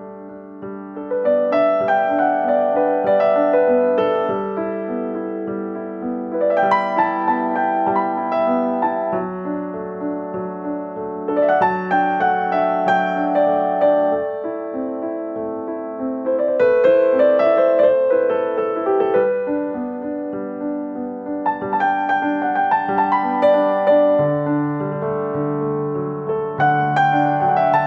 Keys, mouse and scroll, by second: 0.1 g, 0.9 click, 2.5 g, 3.6 middle click, 5.5-5.8 scroll down 9, 5.8 scroll up 1, 5.8 middle click, 6.3 scroll up 5, 6.4 middle click, 7.2 r, 7.7 middle click, 8.5-9.1 scroll up 5, 8.7 middle click, 8.9 shift+middle click, 9.1 shift+middle click, 9.3-9.8 scroll down 4, 9.4 shift+middle click, 9.7 shift+middle click, 9.8-10.2 scroll up 3, 10.1 s, 10.8 ctrl+z, 10.8 ctrl+z, 11.0 ctrl+z, 11.2 s, 11.7 shift+middle click, 11.9 shift+middle click, 12.1 scroll down 1, 12.4 shift+middle click, 12.7 g, 13.7 shift+middle click, 13.9 click, 15.5 g, 16.6 shift+middle click, 17.1 click, 17.4 ctrl+z, 17.6 s, 18.4 ctrl+z, 18.8 s, 19.3 click, 23.2 middle click, 24.2 g, 25.6 middle click, 25.9-26.5 scroll down 3, 26.1 middle click, 27.1 scroll down 2, 27.3 middle click.